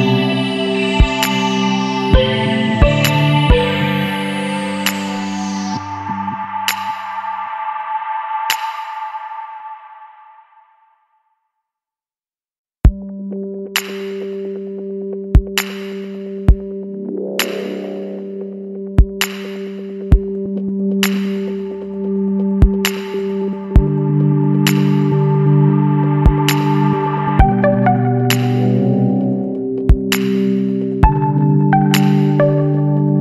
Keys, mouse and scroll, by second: 3.8 click, 5.6 click, 7.1-7.8 scroll up 1, 9.1 click, 10.2 click, 11.0 space, 12.7 scroll up 2, 13.7 Down, 14.7 click, 15.5 Down, 15.8 Left, 16.1 Up, 17.4 click, 19.6 click, 20.9 click, 22.2 click, 23.6 click, 25.0 click, 26.1 KP_1, 26.6 KP_Enter, 28.7 click, 29.8 KP_1, 30.3 KP_Enter, 31.3 scroll up 2, 32.4 Down.